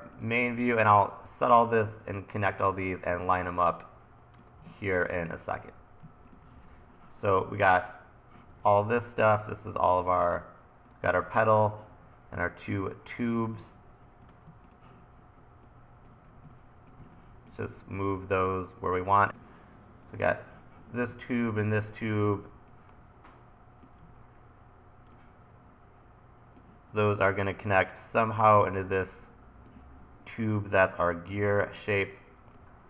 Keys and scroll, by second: 1.5 e, 6.6 e, 8.7 super+z, 10.2 super+z, 13.6 super+z, 16.2 super+z, 17.0 1, 24.0 super+z.